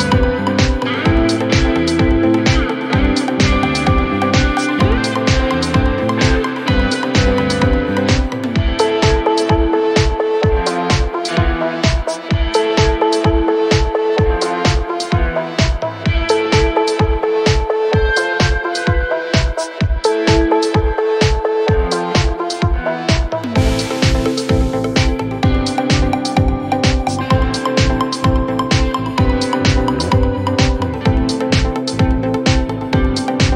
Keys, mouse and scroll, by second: 0.7 s, 1.5 ctrl+z, 2.7 alt+click, 3.1 s, 3.9 Tab, 4.4-5.8 shift+middle drag, 5.8 Tab, 6.2 s, 7.3-9.0 shift+middle drag, 9.0-10.0 scroll up 1, 10.0 click, 10.4 s, 12.3 Tab, 12.8 click, 12.9 scroll down 3, 13.2 shift+middle click, 14.0 Tab, 14.5 shift+middle click, 14.7 scroll up 2, 15.3 g, 16.7 ctrl+z, 17.1 scroll down 1, 17.2-19.4 middle drag, 19.4 alt+click, 19.9 scroll down 1, 20.1 middle click, 20.6 scroll down 2, 20.8 KP_1, 21.0 scroll up 5, 21.5 g, 25.7 click, 26.1 shift+middle click, 27.0 ctrl+r, 29.3 g, 30.4 ctrl+z, 31.1 ctrl+r.